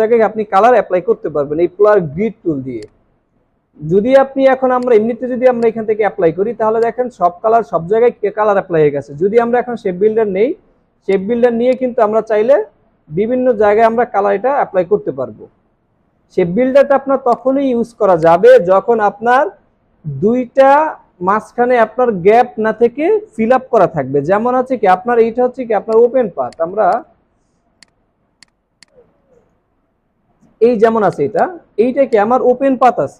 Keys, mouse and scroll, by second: 19.6 Delete, 26.0 right click.